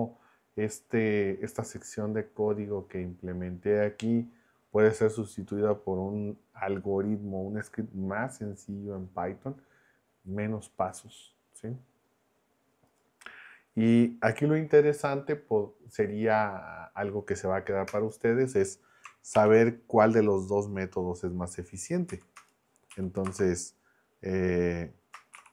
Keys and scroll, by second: 17.9 Return, 19.4 shift+3, 22.1 Left, 22.4 Return, 22.9 Right, 23.2 space, 25.3-25.5 typing.